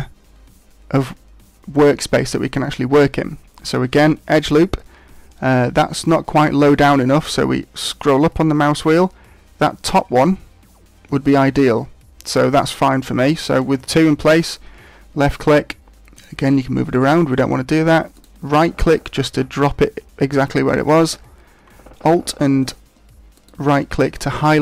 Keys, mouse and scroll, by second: 4.3 ctrl+r, 18.2 right click, 23.3 alt+right click.